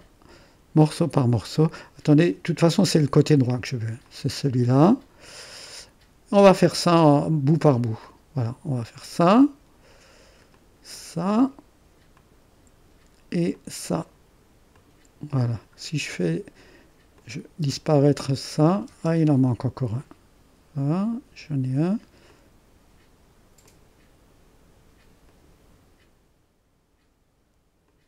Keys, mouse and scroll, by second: 2.2-3.5 drag, 4.0 click, 8.4 click, 10.5-15.7 drag, 15.8-16.9 scroll down 1, 17.1-18.8 drag, 17.6 space, 18.8 space, 22.2-24.7 drag, 25.2-26.6 drag, 27.8 click.